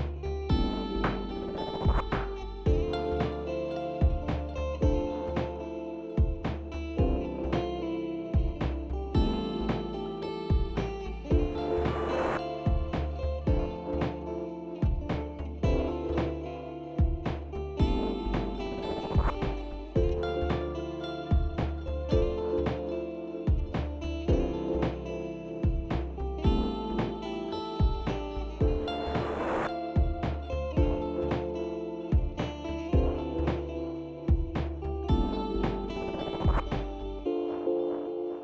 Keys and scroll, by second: 7.2 Tab, 12.2 ctrl+b, 19.7 KP_1, 21.5 shift+z, 30.7 Tab.